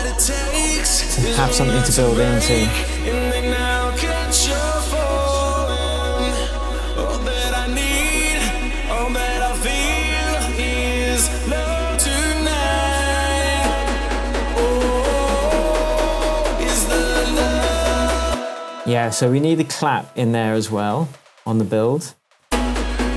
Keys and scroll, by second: 18.2 space, 21.2 super+c, 22.1 super+v, 22.4 super+space, 23.0 space.